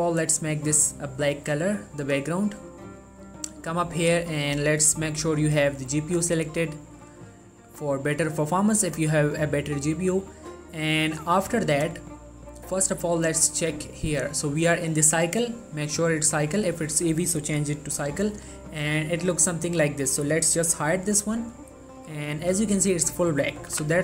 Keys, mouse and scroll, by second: 7.9-8.3 scroll down 2, 8.3-10.6 scroll up 2, 10.6 scroll up 1, 11.6 middle click, 13.2 click, 18.5 click, 23.9 n.